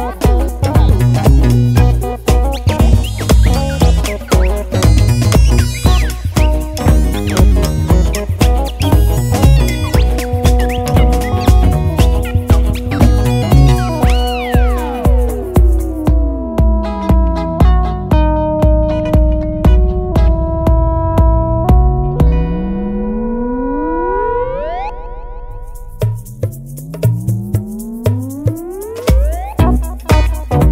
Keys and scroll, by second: 15.6 BackSpace, 16.0 BackSpace.